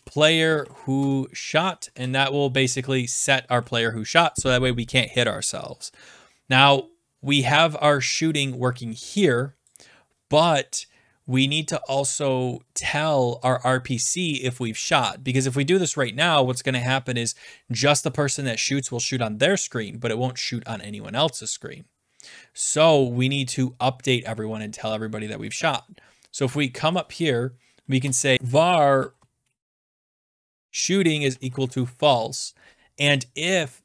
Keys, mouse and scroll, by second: 0.0-1.1 typing, 1.9 ctrl+s, 9.7 click, 14.3 click, 19.3 click, 27.0-28.6 drag, 27.7-32.1 typing, 33.3 click, 33.6 Return, 33.6-33.8 typing.